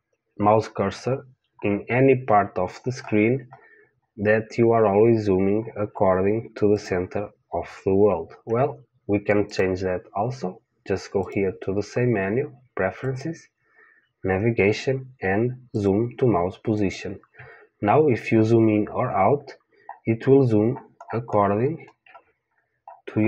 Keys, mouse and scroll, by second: 0.9-7.7 middle drag, 6.7 click, 9.5 click, 19.3-23.2 middle drag.